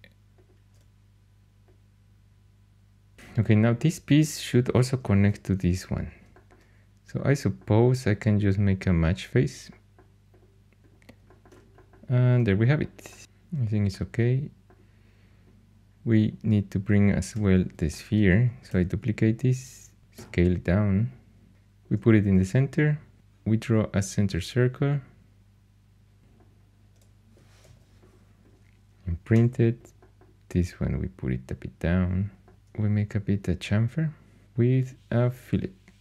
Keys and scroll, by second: 17.2 4, 18.6 shift+d, 20.1 s, 27.6 shift+i, 29.3 3, 32.5 2.